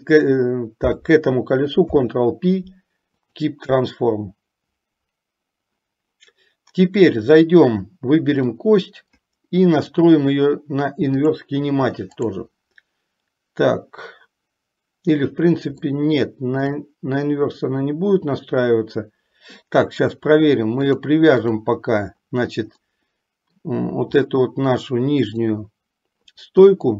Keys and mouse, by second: 1.8 ctrl+p, 9.9-11.6 drag, 12.2 click, 16.2 shift+middle click, 21.1 click, 23.1 middle click, 25.2 click.